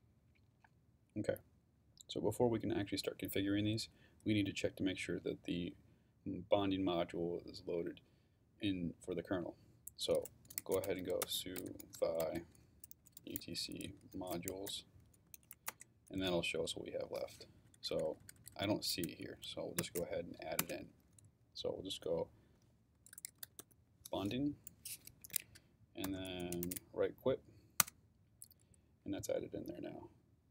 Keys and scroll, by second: 10.4-16.0 typing, 17.6 Down, 19.3 shift+Down, 19.8 shift+a, 20.6 shift+Return, 22.3-24.1 typing, 25.2 Escape, 25.8-27.1 typing, 27.8 Return.